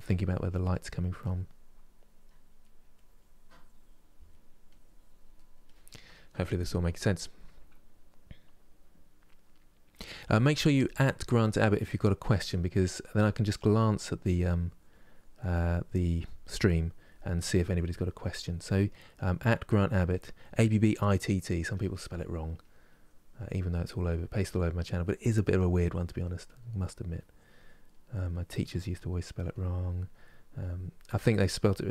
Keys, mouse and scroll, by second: 0.0 click, 0.6 middle click, 0.9-2.3 drag, 2.3 middle click, 2.6-4.0 drag, 4.0 middle click, 4.4 click, 5.0 middle click, 5.4-11.2 drag, 11.2-12.5 middle drag, 12.5-13.5 drag, 13.5 middle click, 13.9-17.1 drag, 17.1 middle click, 17.6 click, 18.5 middle click, 18.9 click, 19.8 middle click, 20.4 click, 20.9 middle click, 21.4 click, 21.9 middle click, 22.3 click, 23.2 middle click, 23.6 click, 24.1 middle click, 24.6 click, 25.4 middle click, 25.9 click, 26.4 middle click, 26.9 click, 27.6 middle click, 28.0 click, 28.8 middle click, 29.2 click, 29.9 middle click, 30.3 click, 31.0 middle click, 31.4-31.9 drag.